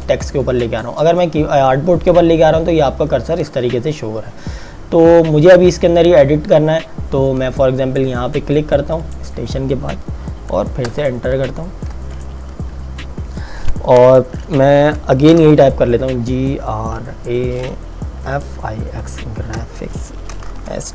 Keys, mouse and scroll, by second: 9.1 click, 10.9 Return, 16.1-20.9 typing.